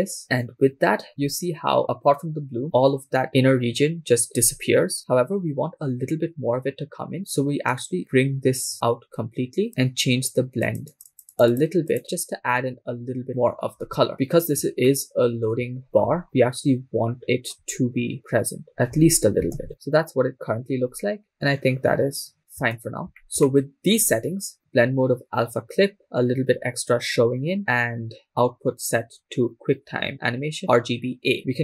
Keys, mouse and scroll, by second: 1.8 scroll up 2, 7.7-9.7 drag, 10.7 click, 10.9 click, 11.1 click, 12.6 scroll down 3, 13.7-14.3 scroll down 7, 15.1-15.5 shift+middle drag, 16.0 shift+middle click, 16.0-17.2 scroll up 5, 17.2 scroll up 1, 17.2-18.7 shift+middle drag, 17.2-17.5 scroll down 4, 18.8 click, 18.8-19.4 scroll down 1, 19.4 scroll down 2, 19.8 shift+space, 22.8 shift+space, 23.4 scroll up 3, 23.5 shift+click, 23.5 shift+middle click, 27.6-28.2 scroll up 13, 28.6 click, 28.7-30.1 scroll down 5, 30.6 scroll up 1.